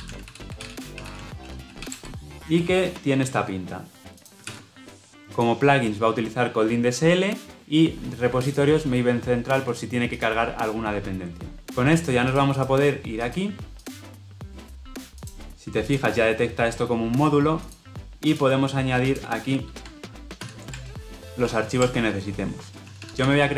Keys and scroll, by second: 4.4 ctrl+v, 20.4 alt+Insert.